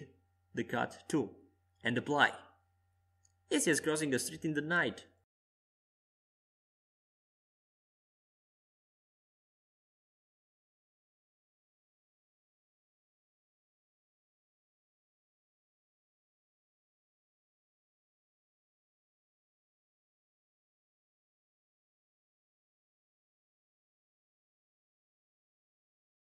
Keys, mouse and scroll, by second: 1.3 s, 4.8 Tab, 5.7 right click, 6.4-15.6 middle drag, 12.2-16.4 right drag, 15.6 f, 16.4 middle click, 18.2-21.5 drag, 21.5 middle click, 21.5 click, 21.7-23.5 middle drag, 23.5-25.2 drag, 25.2 Tab.